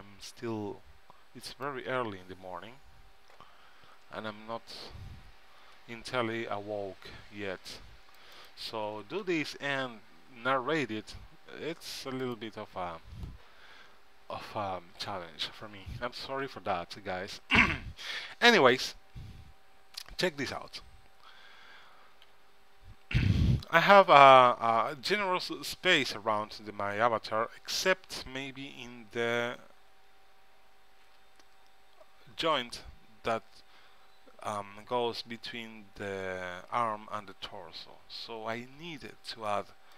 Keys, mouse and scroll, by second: 5.8 a, 6.4 c, 9.0 g, 22.4 z, 39.0 c.